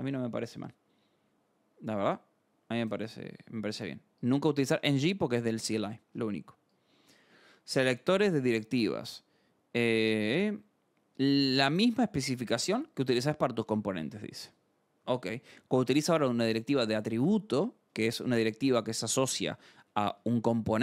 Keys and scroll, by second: 4.1 scroll, 10.3 scroll, 11.8-13.6 scroll, 18.1 alt+Tab, 19.2 Escape, 19.6-20.7 typing.